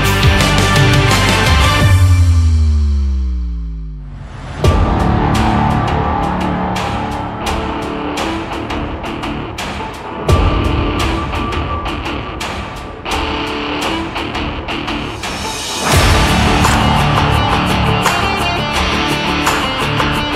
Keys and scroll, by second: 1.8 Down, 8.5 ctrl+z, 18.2 Left.